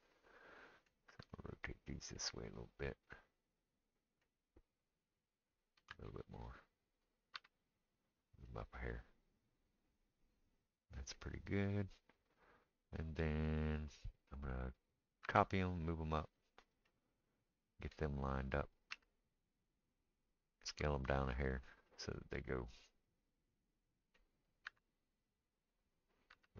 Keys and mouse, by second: 1.1 r, 5.8 r, 7.3 g, 9.5-10.1 middle drag, 10.1-26.5 right drag, 15.2 shift+d, 18.9 g, 20.7 s, 24.7 r, 26.3 g.